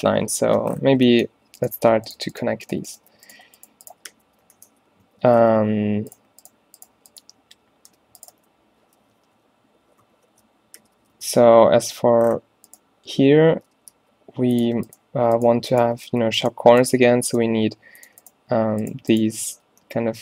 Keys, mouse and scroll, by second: 3.2-5.7 typing, 7.9 d, 8.4 f, 9.2 ctrl+z, 10.2 ctrl+z, 10.9 f, 11.2 a, 11.5 a, 14.0 v, 16.2 f, 17.6 v, 19.4 f.